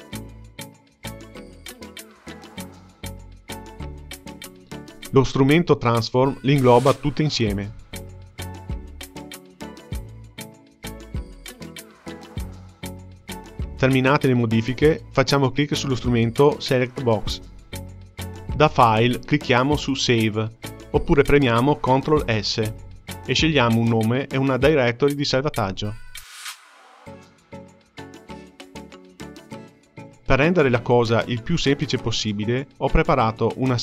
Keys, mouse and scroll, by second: 1.1 click, 3.3 ctrl+z, 3.6 ctrl+z, 3.8 ctrl+z, 6.2 click, 8.8 click, 11.4-13.0 middle drag, 15.0-17.9 drag, 19.0-22.0 drag.